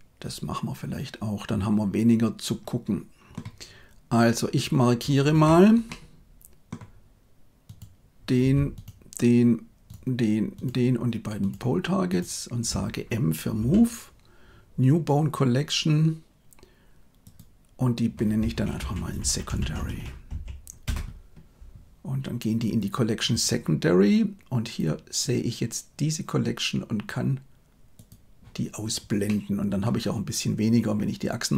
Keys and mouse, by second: 5.2 Tab, 5.8 middle click, 10.4 shift+click, 13.5 m, 27.8 click, 29.1 middle click.